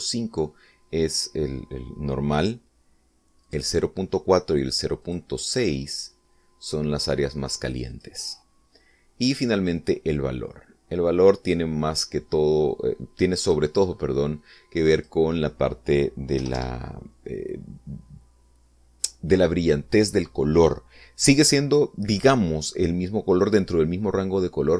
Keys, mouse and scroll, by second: 0.2 click, 0.8 click, 4.4 click, 6.0 click, 6.4 click, 8.9 click, 10.6-14.7 drag, 15.9 click, 17.4 1, 17.5 Return.